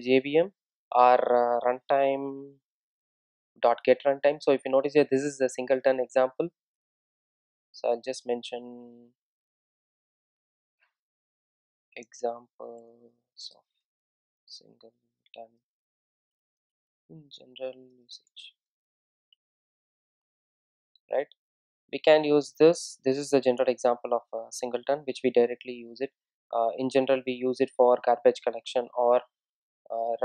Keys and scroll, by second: 3.9 Return, 25.7 super+x, 28.0 super+v.